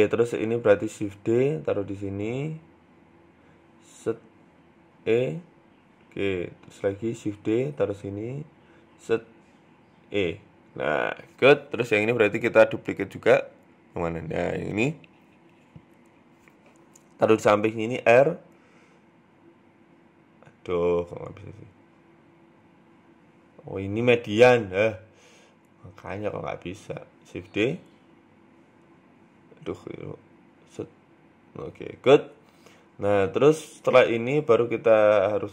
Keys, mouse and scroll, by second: 0.1 shift+middle click, 0.3 Tab, 1.3 shift+d, 3.4 right click, 4.6-5.2 scroll up 2, 5.2 e, 5.9 shift+middle click, 6.2-6.7 scroll down 2, 6.7 right click, 7.1 shift+d, 8.4 right click, 10.0 e, 10.9 middle click, 11.8 KP_3, 12.1 KP_1, 13.4-13.8 scroll down 2, 13.6 middle click, 14.1 click, 15.2 KP_1, 15.5 scroll up 3, 16.4 g, 18.0 r, 23.0 click, 24.2 r, 25.5 g, 27.2 shift+d, 28.6 e, 30.0 r, 30.9 g, 32.2-33.5 scroll down 7, 32.4 Tab, 32.6 middle click, 33.1 middle click, 33.5-34.1 scroll up 7, 34.1 Tab, 34.7 right click.